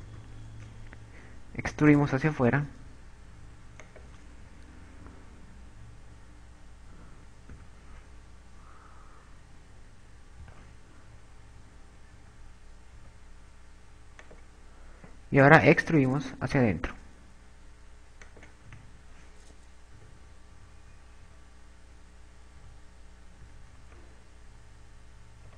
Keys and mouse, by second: 1.1 KP_4, 1.5 KP_4, 3.0 e, 5.3 click, 7.5 e, 13.1 s, 15.5 click, 16.5 e, 19.3 click, 20.1 a, 21.5 Tab, 21.9 KP_8, 22.2 KP_8, 23.7 a, 25.1 z.